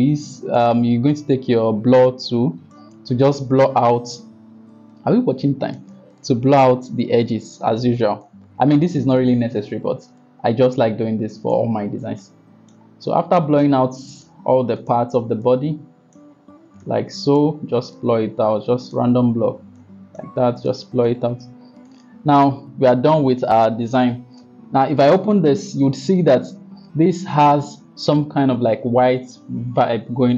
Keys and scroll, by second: 3.7 ].